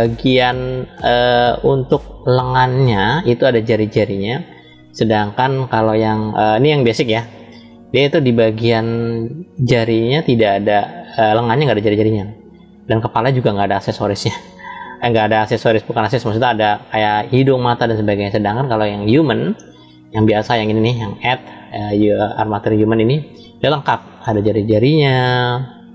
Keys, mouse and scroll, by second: 0.3 click, 2.1 click, 3.5 click, 7.2-8.0 middle drag, 8.6-9.4 shift+middle drag, 14.0-14.8 shift+middle drag, 18.7 click, 20.9-23.9 drag.